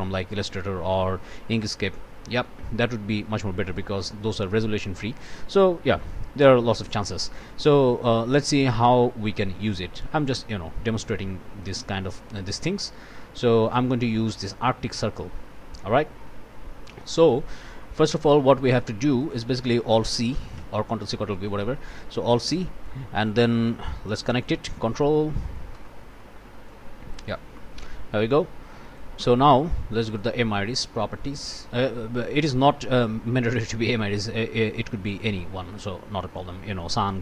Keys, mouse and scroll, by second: 3.6 right click, 5.1 click, 6.0 click, 6.5 scroll up 2, 8.0-11.9 drag, 11.9 scroll down 2, 12.2 scroll up 2, 12.7-13.2 scroll up 2, 13.2-13.7 scroll down 2, 13.7 click, 13.9-15.7 scroll down 2, 15.7-17.5 drag, 17.9 click, 18.4 click, 19.1 click, 20.6 alt+c, 21.4 click, 22.5 click, 23.2 scroll up 1, 23.6 click, 24.4-25.8 ctrl+drag, 25.8 ctrl+middle click, 26.7 ctrl+click, 27.5 ctrl+middle click, 28.3 click, 29.3 middle click, 29.9 click, 32.2-32.5 scroll up 1, 35.7 click.